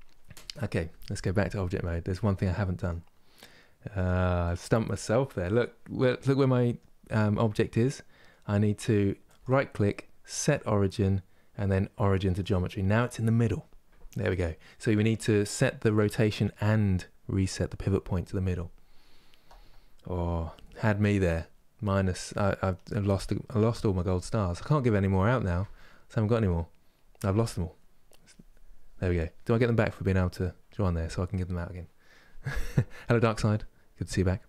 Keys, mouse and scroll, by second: 4.2 click, 4.9-12.1 middle drag, 27.4 middle click, 27.9-30.4 drag, 30.4-34.4 middle drag.